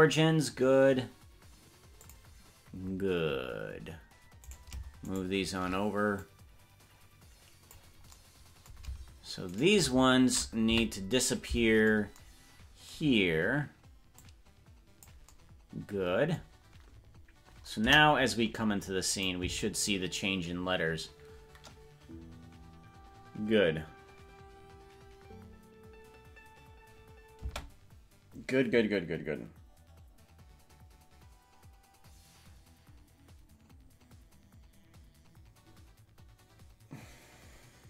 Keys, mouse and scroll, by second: 4.6 right click, 5.2 shift+right click, 6.2-7.8 drag, 9.6 shift+right click, 10.8 Left, 14.1 click, 17.8 KP_0, 19.1 click, 19.4 space, 27.6 space.